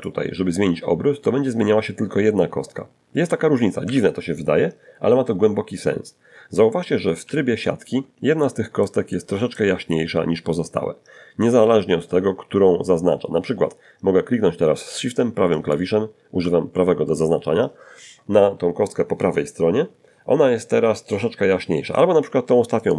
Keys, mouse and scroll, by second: 2.1 Escape, 5.5 z, 6.6 middle click, 7.3 middle click, 8.3-9.3 scroll up 2, 13.8 shift+click, 21.0 shift+right click.